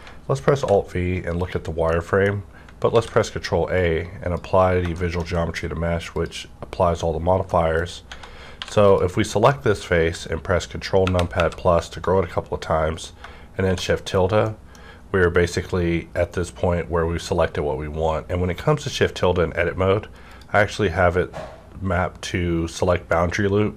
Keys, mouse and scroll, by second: 0.6 alt+v, 1.3 click, 1.9 middle click, 2.3 scroll up 1, 2.9 ctrl+a, 3.7-6.0 drag, 5.0 middle click, 7.4 middle click, 7.9 scroll up 1, 8.1 Tab, 8.6 3, 8.8 click, 9.6 scroll down 1, 11.0 ctrl+KP_Add, 12.9 scroll up 1, 13.6 shift+~, 14.0 scroll down 1, 14.4 middle click, 20.3 middle click, 20.3 scroll down 1, 20.3 click.